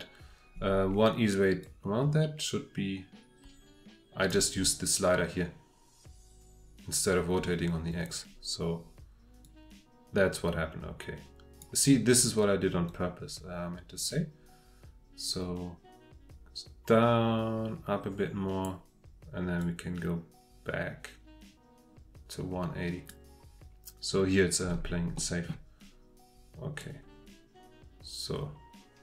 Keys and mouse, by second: 1.8-4.3 drag, 9.4 click, 11.6-13.0 middle drag, 13.0-14.0 drag, 14.0-15.3 middle drag, 15.3-18.6 drag, 18.6-19.7 middle drag, 19.7-23.1 drag, 25.1-25.5 drag, 26.8-29.0 drag.